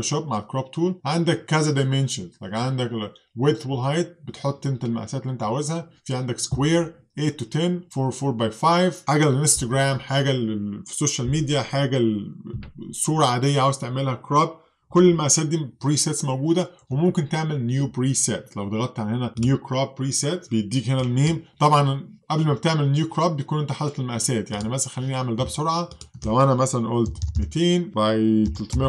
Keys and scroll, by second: 26.9-28.8 typing.